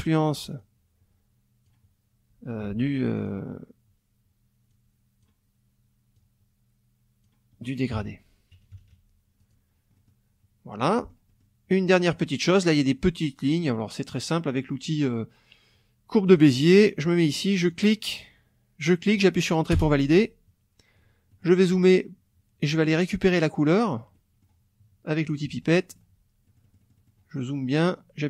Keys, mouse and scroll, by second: 0.6-1.8 drag, 2.7 ctrl+z, 3.2 ctrl+click, 4.7 click, 6.2-7.4 drag, 7.7 click, 8.0 F1, 8.5 KP_Subtract, 9.4 click, 9.9 middle click, 10.8 middle click, 11.8 middle click, 16.3 click, 17.7 click, 18.8 click, 19.7 Return, 21.3 click, 22.7 click, 24.1 click, 24.5 middle click, 25.3 click, 25.6 middle click, 26.5 middle click.